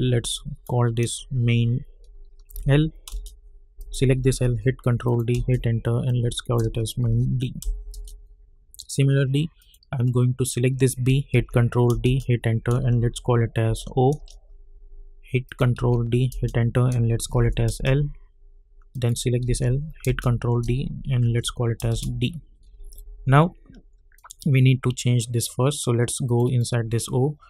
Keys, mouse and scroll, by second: 2.5 shift+l, 3.1 Return, 3.8 click, 4.4 ctrl+d, 5.0 click, 5.3 Return, 6.0 click, 7.0 shift+d, 7.9 Return, 9.6 click, 11.3 ctrl+d, 12.0 Return, 13.6 shift+o, 14.1 Return, 15.4 click, 15.7 ctrl+d, 16.3 Return, 17.3 shift+l, 17.7 Return, 18.9 click, 19.4 ctrl+d, 20.0 Return, 21.2 shift+d, 21.9 Return, 24.1 click.